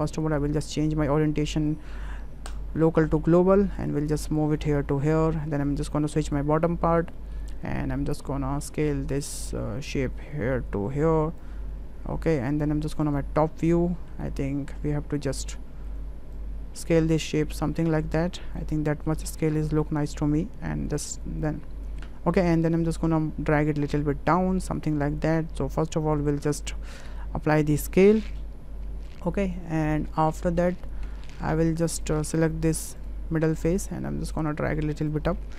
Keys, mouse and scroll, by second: 0.8-2.9 drag, 3.2 shift+middle drag, 3.9 click, 4.6 shift+middle click, 5.0-5.3 middle drag, 7.2 shift+drag, 7.9 shift+click, 8.8 click, 10.0-11.4 drag, 13.8 middle drag, 15.1 middle drag, 15.6 middle drag, 16.3-18.6 drag, 18.9 middle click, 19.6 shift+middle click, 20.4 middle click, 20.9 w, 23.0-26.1 drag, 27.1 ctrl+a, 29.6-30.6 middle drag, 31.1 Tab, 31.3 middle click, 31.6 click, 32.8 3, 33.0 click, 33.7 click.